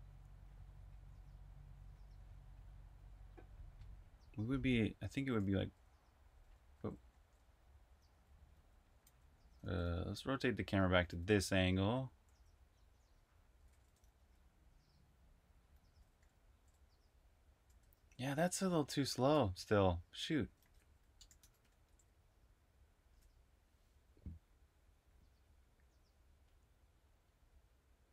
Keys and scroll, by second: 5.2-16.9 typing, 17.8 super+q, 18.8-21.4 typing, 22.9 super+r, 23.0-24.1 typing.